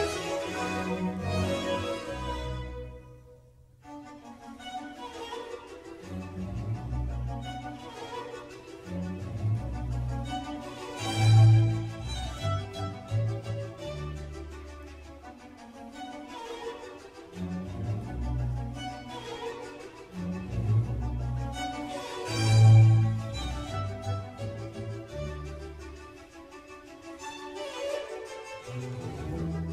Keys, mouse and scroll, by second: 0.1-0.4 scroll up 1, 0.4 Tab, 1.4 ctrl+r, 5.8 Tab, 6.4-8.3 middle drag, 8.3-9.0 scroll down 3, 9.0-9.8 middle drag, 9.8-10.8 scroll up 4, 10.8 click, 11.4 Tab, 11.8-14.8 middle drag, 17.6 ctrl+r, 26.6-27.6 middle drag, 27.6 3, 28.4 click, 28.6-29.1 scroll up 1, 29.1-29.7 scroll down 1.